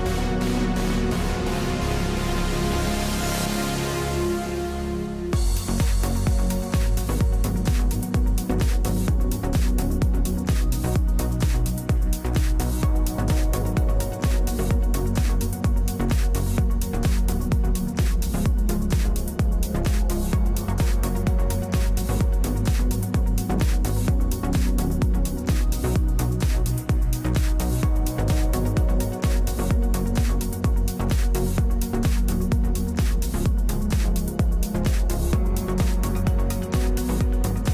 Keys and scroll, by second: 0.0-3.3 typing, 36.7-37.7 typing.